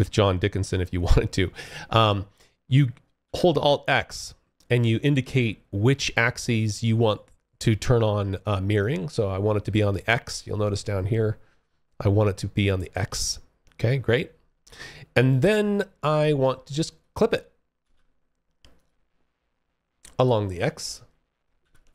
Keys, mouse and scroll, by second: 2.3 alt+x, 14.5 click, 15.8 alt+click, 16.9 alt+x, 17.8 click, 20.8 alt+x, 21.5 click.